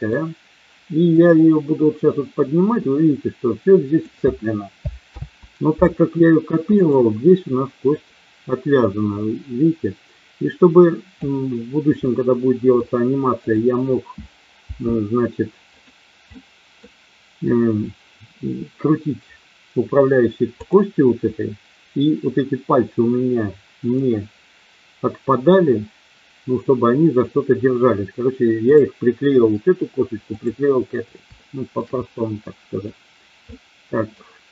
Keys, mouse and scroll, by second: 1.2 click, 2.2-4.0 drag, 5.0 ctrl+z, 7.9-11.2 drag, 12.0 middle click, 13.4 click, 14.5 g, 15.7 click, 16.3 middle click, 28.5 click, 31.4 shift+middle click, 32.3 middle click, 33.4 middle click.